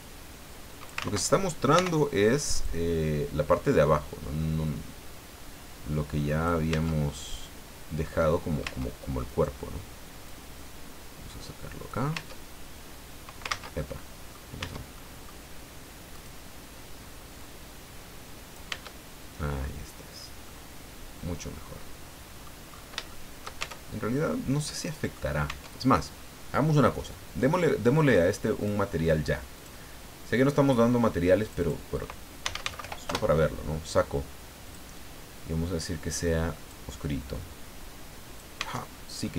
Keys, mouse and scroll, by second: 1.0 ctrl+z, 1.7 o, 2.6 click, 3.4-3.7 scroll down 2, 3.9-5.1 scroll down 6, 6.7 Tab, 8.6 Tab, 9.3 right click, 10.3-12.1 drag, 12.1 Tab, 13.5 ctrl+z, 13.9 ctrl+middle click, 14.6 Tab, 14.9 middle click, 16.1 right click, 16.4 middle click, 17.4-18.7 drag, 18.7 Tab, 19.6-20.3 scroll down 4, 20.4-22.6 middle drag, 22.7-23.0 scroll up 3, 23.1 shift+middle click, 23.6 shift+Tab, 24.0-24.3 shift+scroll down 3, 24.3 click, 25.5 Tab, 28.6 click, 29.5 click, 31.4 click, 32.2-33.3 typing, 34.6 click, 36.2-38.5 drag, 38.6 Tab, 38.9 scroll down 1, 39.2-39.3 middle drag.